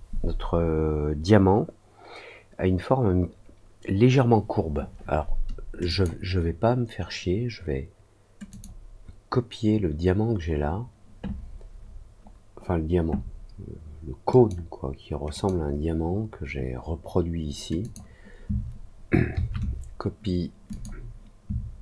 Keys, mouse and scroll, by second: 5.8 click, 8.4 click, 11.7 middle click, 12.2 middle click, 14.2 click, 17.7 click, 20.6 click.